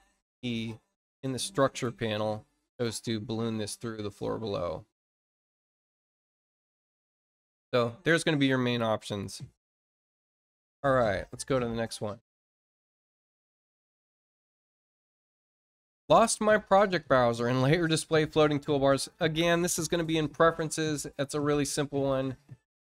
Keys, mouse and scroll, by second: 0.5 click, 4.0 click, 5.0 click, 6.4 click, 12.1 click, 20.9 click, 22.0 click.